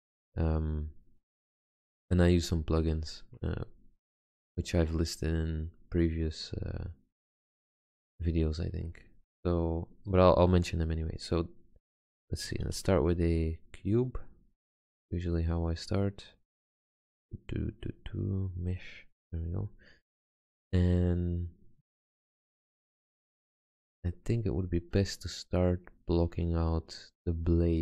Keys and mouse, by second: 8.0-12.2 middle drag, 12.9 shift+a.